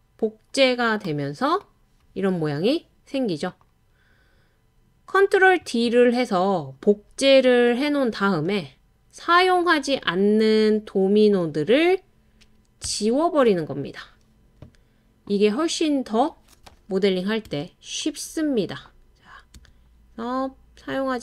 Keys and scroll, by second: 12.9 BackSpace, 17.5 BackSpace, 19.6 BackSpace.